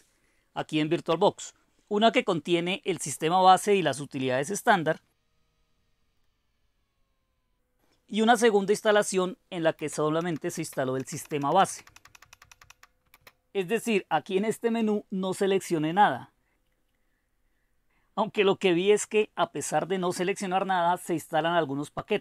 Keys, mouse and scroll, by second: 0.6 click, 1.3 Return, 4.4 click, 4.8 click, 6.2-7.5 drag, 9.7 space, 10.2 Down, 10.5 space, 10.9 Down, 11.2 Down, 11.4 Down, 11.6 Down, 11.7 Down, 11.9 Down, 12.6 Down, 13.1 space, 15.4 click, 19.5-22.2 drag.